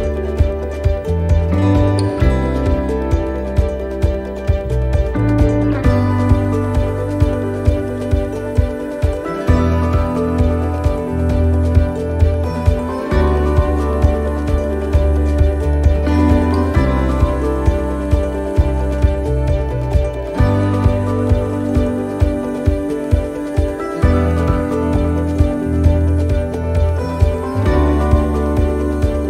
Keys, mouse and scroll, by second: 1.3 click, 2.6 shift+middle click, 3.3 middle click, 5.5-6.0 scroll down 8, 6.2 middle click, 6.2-6.8 scroll up 5, 8.1 l, 8.8 middle click, 9.5 middle click, 11.0 p, 13.5 click, 15.6 right click, 16.7 scroll down 3, 17.3 shift+middle click, 17.6 shift+scroll down 1, 17.7-18.0 scroll up 4, 18.2 shift+middle click, 18.7 middle click, 19.2 shift+middle click, 19.8 middle click, 22.4 click, 24.3 click, 25.0 click, 26.3 o.